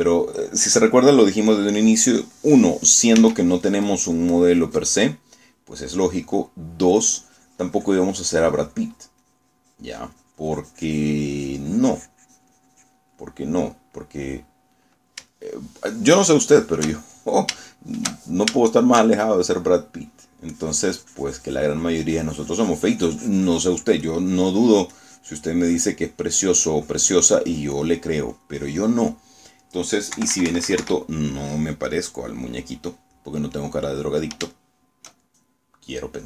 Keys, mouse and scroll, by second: 1.9 middle click, 4.3 s, 4.7-6.1 drag, 6.2 middle click, 6.9 middle click, 8.0-14.2 drag, 14.3 middle click, 16.4 shift+middle click, 17.5-18.7 shift+middle drag, 18.7-20.6 shift+middle drag, 20.8 shift+middle click, 21.6-30.1 drag, 30.3 middle click, 31.3 KP_Subtract, 32.1-33.9 middle drag, 33.9 click, 34.3 click, 35.6 shift+click.